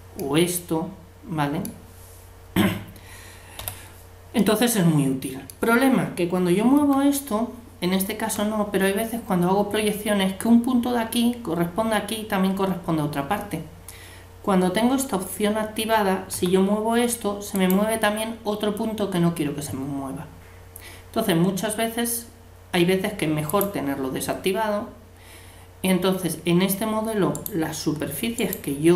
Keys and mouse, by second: 0.2-1.3 middle drag, 3.6 l, 4.4-6.1 drag, 6.8 g, 16.3 g, 23.5-25.2 drag, 27.3-28.9 right drag.